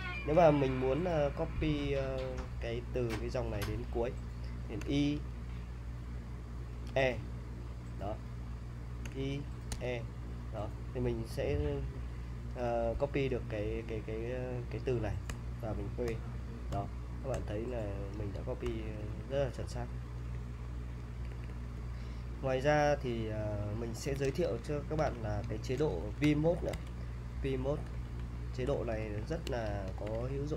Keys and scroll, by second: 4.8 y, 6.9 e, 9.1 y, 9.7 e, 15.3 p, 16.1 p, 16.7 p, 18.7-19.4 typing, 21.2-23.9 typing, 24.3 super+Tab, 25.1 Return, 26.0-30.5 typing.